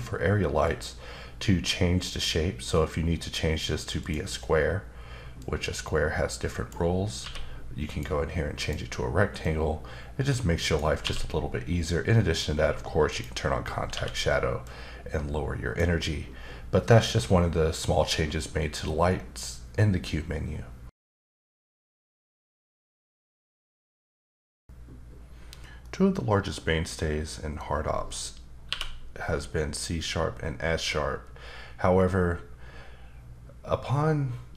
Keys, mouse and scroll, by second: 0.6 click, 4.0 click, 5.4 click, 7.2 q, 8.6 click, 9.4 click, 11.0 q, 13.1 click, 13.9 q, 14.6 click, 28.7 q.